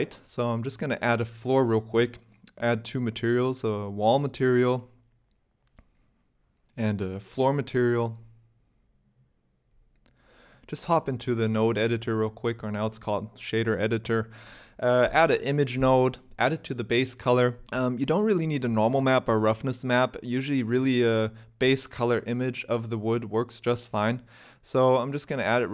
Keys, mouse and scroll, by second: 0.4 ctrl+click, 2.0 click, 3.0 click, 3.7 click, 3.8 click, 4.5 l, 5.9 click, 6.8 click, 7.1 click, 7.5 click, 7.9 click, 8.7 o, 10.5 click, 11.7 click, 13.2 n, 13.5-14.3 scroll up 11, 14.3 middle click, 14.3 shift+a, 16.5 middle click, 17.2 click.